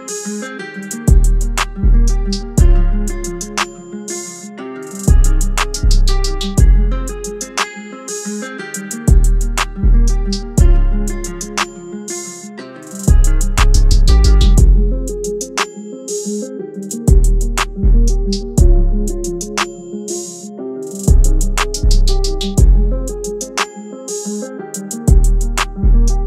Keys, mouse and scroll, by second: 15.2 double click, 24.5 double click.